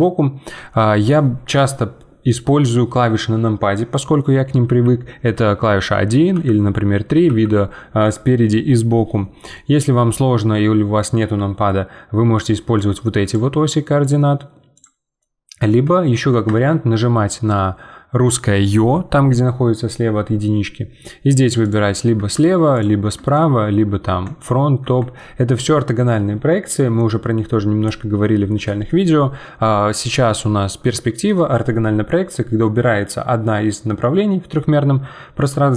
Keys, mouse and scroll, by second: 4.6 KP_1, 7.2 KP_1, 9.5-12.3 middle drag, 12.3 click, 13.2 click, 15.2-16.5 middle drag, 16.5 `, 25.6-33.4 middle drag.